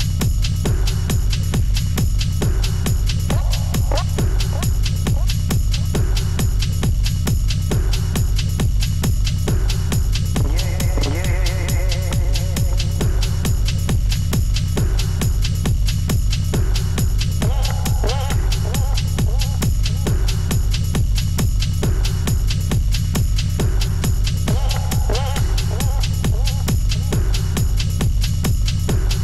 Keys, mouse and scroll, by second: 0.4 alt+Tab, 4.8 Return, 5.0-5.6 alt+scroll up 7, 6.7 Return, 7.4 ctrl+u, 10.0 Return, 10.4-11.0 alt+scroll up 3, 12.0 alt+scroll up 3, 12.3 Down, 12.4 Down, 12.6 Down, 13.1-13.6 alt+scroll down 1, 13.6-14.7 alt+scroll down 7, 17.0 Return, 17.1 Up, 17.2 Up, 18.1 shift+Down, 18.3 Up, 19.2 Up, 19.4 Left, 19.5 Left, 19.7 Up, 20.2-21.2 alt+scroll down 3, 21.2-25.1 typing, 27.2 Return.